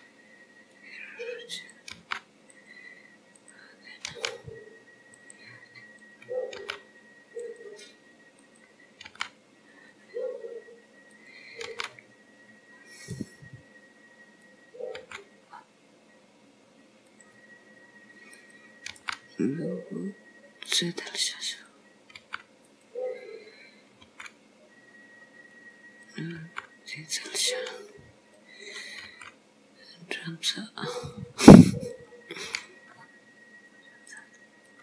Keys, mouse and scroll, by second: 1.8 click, 2.0 g, 3.4 click, 4.1 g, 6.0 click, 6.6 g, 8.5 click, 9.1 g, 11.2 click, 11.8 g, 14.5 click, 15.0 g, 18.4 click, 19.1 g, 21.8 click, 22.3 g, 24.1 g, 26.1 click, 26.4 g, 28.5 click, 29.1 g, 32.1 click, 32.6 g, 34.7 click.